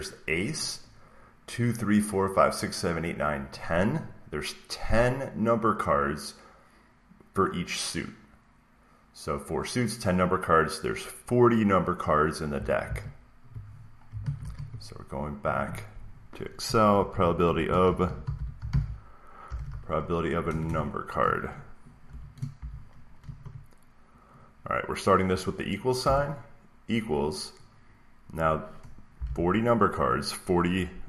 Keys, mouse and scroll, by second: 12.4 click, 12.7 alt+Tab, 14.1 alt+Tab, 14.3 alt+Tab, 16.8-20.5 typing, 22.0-24.1 typing, 25.9 =, 28.8-29.6 typing.